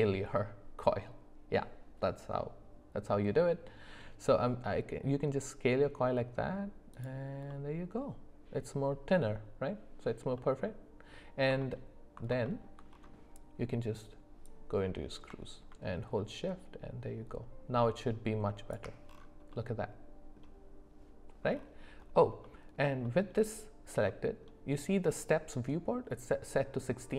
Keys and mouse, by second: 7.5-10.2 middle drag, 10.4 middle click, 11.6 alt+middle click, 12.4 alt+middle click, 14.4-18.7 drag, 19.5 middle click, 22.4 middle click, 23.0 shift+middle click, 24.1 middle click.